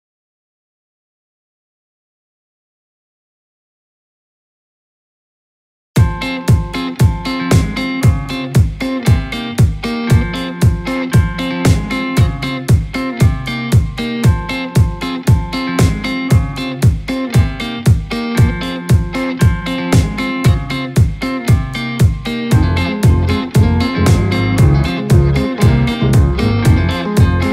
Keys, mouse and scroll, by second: 3.3-5.3 drag, 9.4-10.8 drag, 10.8-11.2 scroll up 4, 11.5 KP_3, 12.6-13.0 shift+middle drag, 13.0 scroll up 1, 13.5 scroll down 1, 13.7 g, 18.3 scroll up 1, 19.3 g, 23.8 scroll down 1, 24.8 g.